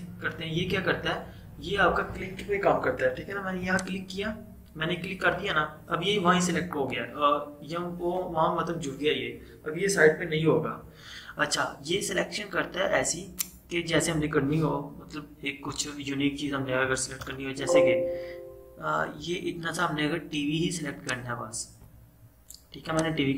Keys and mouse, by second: 3.7 click, 17.3 BackSpace, 19.4 =, 21.1-23.3 drag.